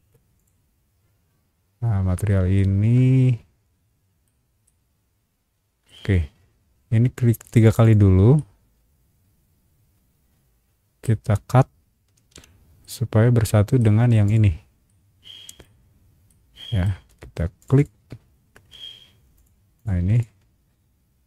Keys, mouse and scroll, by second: 0.3 shift+click, 2.5-4.2 shift+middle drag, 4.6-5.8 shift+middle drag, 7.4 click, 7.6 click, 7.8 click, 8.3-11.0 middle drag, 12.1 ctrl+x, 12.8 middle click, 14.2 click, 14.8 middle click, 16.0 scroll down 1, 16.3 middle click, 17.6 click, 17.7 click, 19.3 click, 19.7 click, 20.1 click.